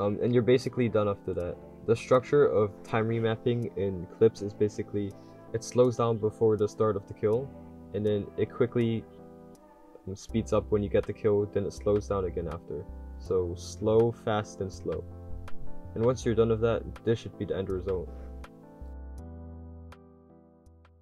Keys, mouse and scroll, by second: 0.0-2.6 drag, 3.3-5.6 typing, 4.2 click, 4.5 drag, 5.6-7.2 drag, 7.2 a, 7.8 click, 7.8 d, 10.2 a, 11.0 d, 11.0 click, 11.4 click, 13.0-15.3 typing, 13.3 click, 14.2 click, 14.6 click, 16.4-18.3 typing.